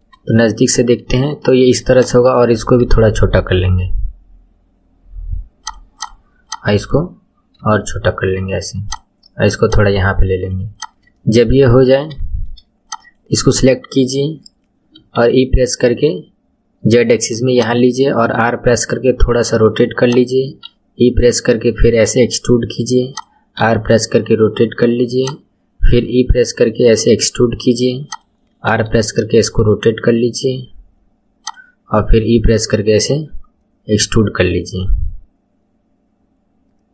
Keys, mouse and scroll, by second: 0.3-1.9 shift+middle drag, 1.9 click, 2.8 s, 5.9 click, 7.6 s, 9.6 click, 10.7 click, 11.1 shift+middle click, 11.6-12.2 scroll up 5, 12.2 shift+middle click, 12.8 click, 14.9 e, 18.3 r, 20.4 e, 23.6 r, 25.9 e, 28.6 r, 31.9 e.